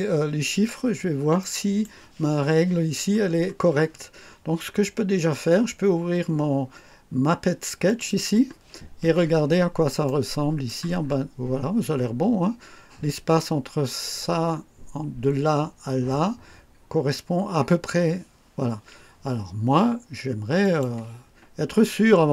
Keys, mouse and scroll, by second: 0.2 scroll up 2, 0.8 scroll down 2, 1.3 right click, 3.2 scroll down 2, 7.8 click, 9.4 scroll up 2, 10.0 right click, 10.9-11.2 scroll up 2, 20.5 click.